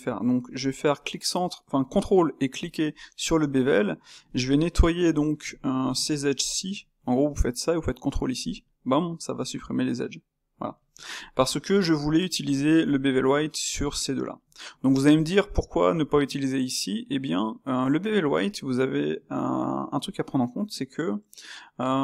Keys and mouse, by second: 2.6 space, 3.4 Tab, 4.2 click, 4.8 middle click, 5.4 shift+click, 6.4 shift+click, 6.6-8.5 middle drag, 8.5 space, 10.4-12.0 middle drag, 12.0 click, 13.7 shift+click, 14.2 shift+click, 14.6-22.0 ctrl+middle drag.